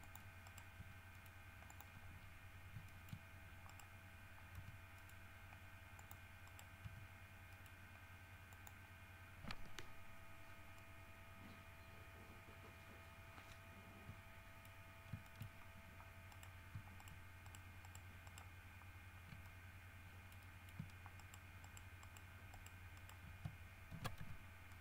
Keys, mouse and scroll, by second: 0.2 click, 0.6 right click, 1.0 g, 1.3 middle click, 1.9 click, 3.1 shift+middle click, 3.9 right click, 4.8 g, 5.2 middle click, 6.2 click, 6.6 right click, 7.0 g, 7.7 middle click, 8.7 click, 9.4 scroll down 2, 10.6 scroll down 2, 11.0 middle click, 14.6 middle click, 15.4 shift+middle click, 15.8 shift+scroll up 1, 16.5 right click, 17.2 shift+right click, 18.0 shift+right click, 18.4 shift+right click, 19.6-21.1 shift+middle drag, 21.4 shift+right click, 21.8 shift+right click, 22.2 shift+right click, 22.7 shift+right click, 23.2 shift+middle click, 24.1 ctrl+f, 24.4 ctrl+g.